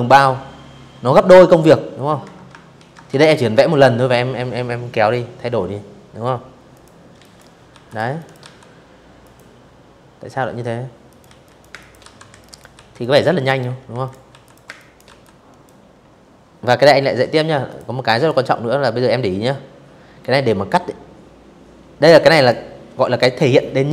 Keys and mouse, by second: 0.4 ctrl+z, 0.7 v, 0.8 click, 4.4 click, 4.8 z, 4.9 click, 5.3 v, 5.5 click, 5.7 space, 5.8 click, 6.0 v, 6.9 click, 8.7 click, 8.9-12.7 typing, 10.0 click, 10.6 click, 11.7 click, 12.1 click, 12.4 click, 12.8 click, 15.3 click, 15.7 click, 20.0 click, 21.9 click.